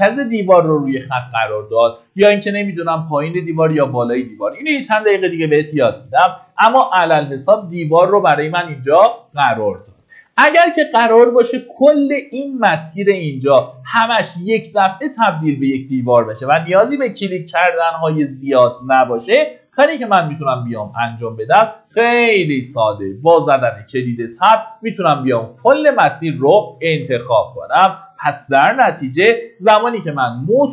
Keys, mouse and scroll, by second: 3.9-4.8 scroll down 1, 4.8 middle click, 6.0 ctrl+z, 9.4-11.1 scroll down 1, 15.8 click, 19.3 ctrl+z, 19.9 ctrl+z, 20.8 ctrl+z, 23.0 Tab.